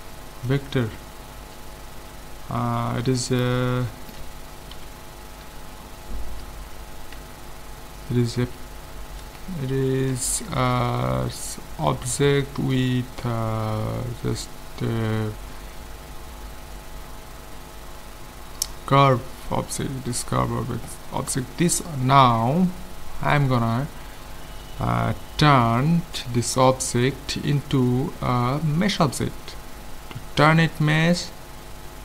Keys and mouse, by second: 1.8 middle click, 3.9-5.8 middle drag, 4.7 KP_7, 7.2 a, 31.0 Tab.